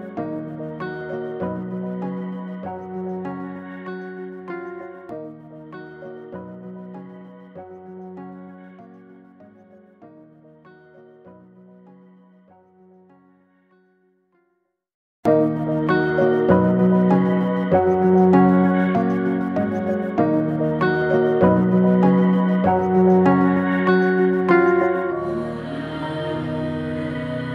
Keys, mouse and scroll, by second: 0.3 click, 1.0 click, 1.7 scroll down 2, 2.6-3.4 middle drag, 3.4-3.9 scroll down 1, 3.9-5.0 middle drag, 5.0 scroll up 2, 5.6-6.1 shift+middle drag, 6.1 scroll up 1, 6.9 Tab, 7.7 Tab, 7.8 click, 8.2 Tab, 10.5 ctrl+r, 12.9 alt+click, 14.4 ctrl+b, 21.1 alt+e, 25.6 Tab, 25.9 scroll down 2, 27.0-27.5 middle drag.